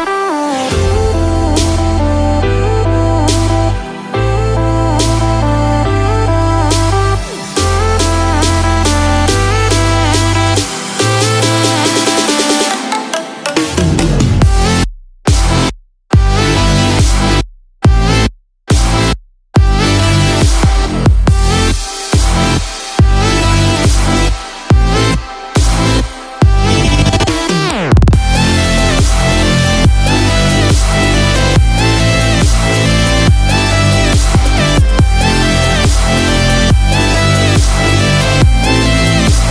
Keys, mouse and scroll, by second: 0.1 click, 0.5 scroll up 1, 1.2 scroll up 4, 1.3 middle click, 3.3-3.9 scroll down 5, 3.9 middle click, 5.4-6.0 scroll up 4, 5.9 shift+middle click, 6.3 middle click, 9.6 scroll down 1, 10.1 shift+middle click, 10.6 middle click, 15.6 middle click, 16.2-16.8 scroll up 5, 17.5 shift+middle click, 18.1-18.6 scroll down 4, 18.5 middle click, 19.5 middle click, 23.6 click, 29.7 i, 32.3-33.1 scroll down 1, 33.2 middle click, 34.3 shift+middle click, 34.8 middle click, 35.5-36.0 scroll up 2, 36.0 shift+middle click, 37.6 click.